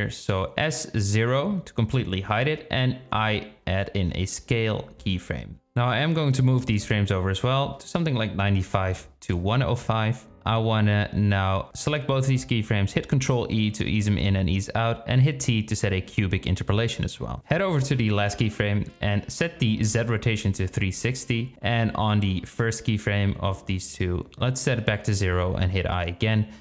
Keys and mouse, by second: 1.7 s, 3.5 i, 5.8-6.3 drag, 7.2-8.6 drag, 10.7 space, 11.0 click, 12.1 ctrl+e, 14.9 t, 17.0-19.7 drag, 20.3 i, 21.7-24.1 drag, 24.7-26.2 drag, 26.1 i.